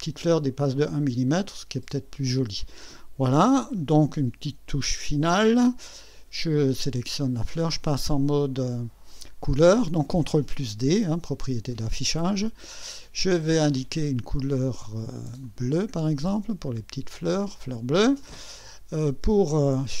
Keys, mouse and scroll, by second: 6.8 click, 7.6 ctrl+d, 13.7 click, 15.4 click, 16.7 click, 18.0 click, 18.6 click.